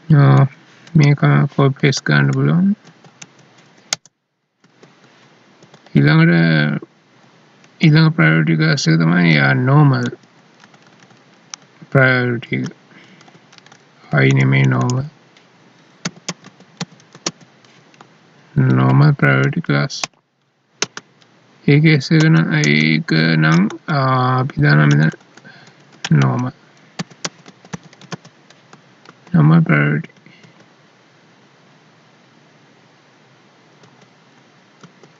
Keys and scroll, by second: 2.9 ctrl+c, 3.2 Right, 4.6 ctrl+v, 5.6 Up, 7.6 ctrl+Right, 9.4 ctrl+Left, 10.6 Left, 13.5 ctrl+Left, 18.7 ctrl+s, 20.9 Down, 22.2 Up, 23.5 Left, 24.9 ctrl+Left, 25.8 ctrl+shift+Right, 29.0 ctrl+s, 30.0 Down, 33.8 Down, 34.9 ctrl+v.